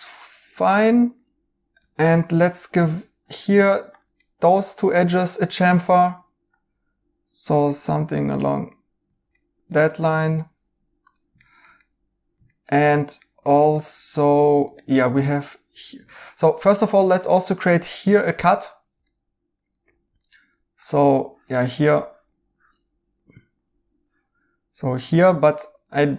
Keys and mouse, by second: 1.7 right click, 2.8 2, 4.1 right click, 8.6 right click, 11.3 right click, 16.0 right click, 20.9 Tab.